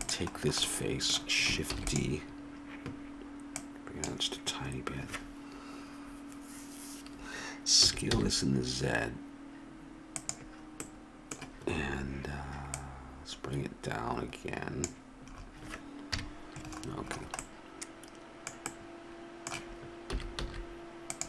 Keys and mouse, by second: 0.0-1.7 drag, 1.7 shift+d, 7.8 s, 12.7-14.5 drag, 16.1 KP_Decimal, 20.1 s.